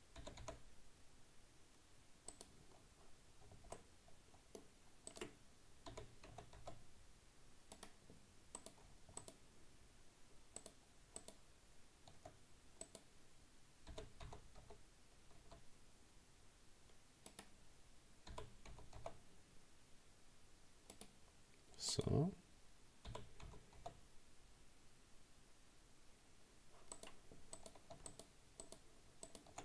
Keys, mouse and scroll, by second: 0.2 g, 3.8-5.1 middle drag, 5.1 right click, 5.9 g, 8.6 right click, 9.2 shift+right click, 10.6 shift+right click, 11.2 shift+right click, 12.9 right click, 13.9 g, 18.3 g, 21.9 right click, 23.1 g, 27.6 right click, 28.1 shift+right click, 28.6 shift+right click, 29.3 shift+right click.